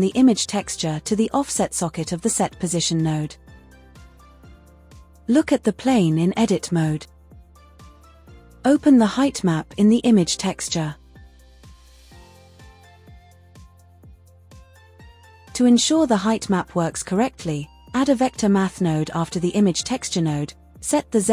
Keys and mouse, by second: 3.2 click, 4.0-5.6 drag, 17.8 shift+a.